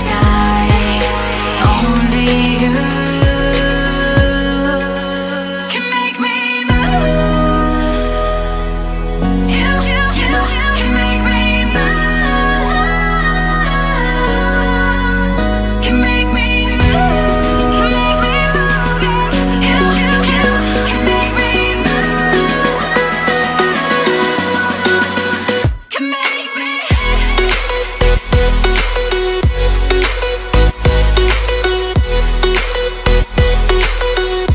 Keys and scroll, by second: 0.0-1.2 typing, 2.9 space, 3.5 space, 7.2 v, 7.7 a, 10.3 Up, 10.9 Up, 13.0 Down, 13.9 Down, 19.7 space, 20.2 space, 20.3 space, 25.8 Tab, 30.8 Tab, 31.1-31.9 space, 32.0 space, 32.1 space, 32.5 v.